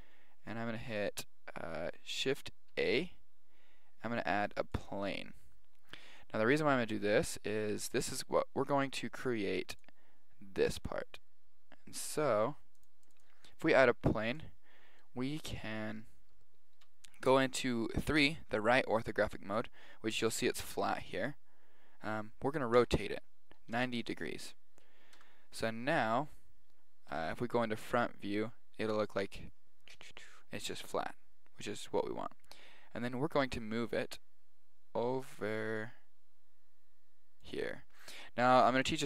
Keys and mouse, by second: 0.0 middle click, 2.7 shift+a, 14.3 click, 15.0-16.9 middle drag, 19.5 z, 20.1-23.1 middle drag, 22.8 r, 25.2 Tab, 25.6-28.4 middle drag, 33.4 g.